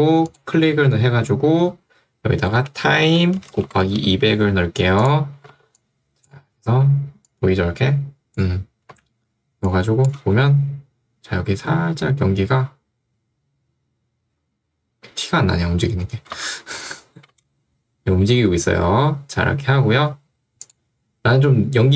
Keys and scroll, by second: 2.2-4.5 typing, 5.6 ctrl+2, 9.0 Escape, 10.2 space, 16.2 space.